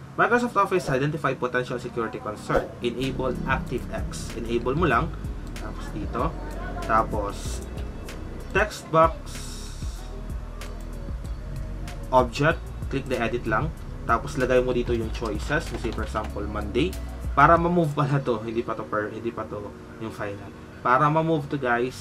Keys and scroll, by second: 15.0-16.5 typing.